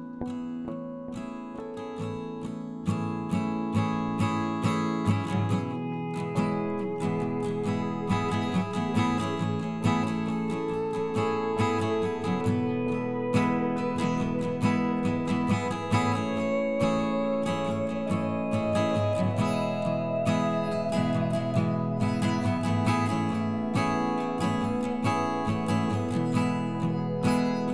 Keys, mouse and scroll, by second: 0.2 s, 2.0 KP_3, 2.6-3.8 scroll up 1, 3.8 s, 6.6 KP_1, 7.2 s, 14.5 middle click, 15.2 Tab, 15.4 click, 15.9 3, 16.2 middle click, 16.7 shift+click, 17.3 KP_1, 18.1 e, 18.6 alt+s, 20.0 middle click, 20.7 ctrl+z, 21.3 i, 23.9 KP_1, 24.4 e, 24.7 alt+s, 25.7 alt+s, 26.1-26.7 scroll down 1, 26.7-27.0 scroll up 1, 27.0-27.7 scroll down 1.